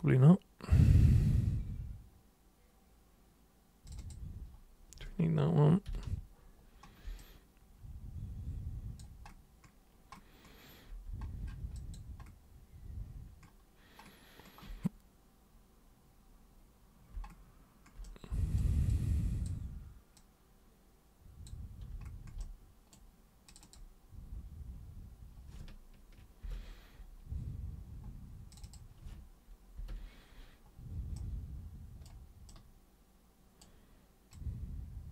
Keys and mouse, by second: 3.8 super+click, 4.0 super+click, 7.2-9.0 alt+super+drag, 11.8 alt+super+click, 18.0 super+right click, 18.9-19.4 super+drag, 20.2 super+click, 21.9 super+space, 22.4 super+right click, 23.4 super+click, 28.5 super+click, 28.6 super+click, 31.2 super+right click, 32.5-33.6 super+right drag, 34.3-35.1 super+drag.